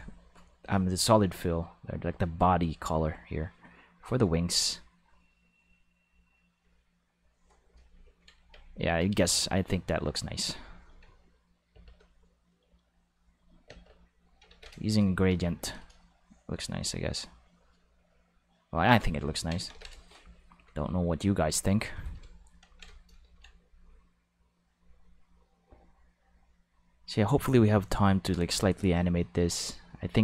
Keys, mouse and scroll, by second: 0.6 click, 1.7-7.2 drag, 8.8 right click, 9.2 g, 10.2 click, 11.0 Tab, 12.3 right click, 12.6 g, 13.3 click, 13.6 Tab, 14.5 ctrl+s, 15.3 Tab, 15.7 right click, 16.2 right click, 16.5 g, 18.6 click, 18.8 Tab, 19.7 ctrl+s, 21.2 click, 24.6-30.2 drag.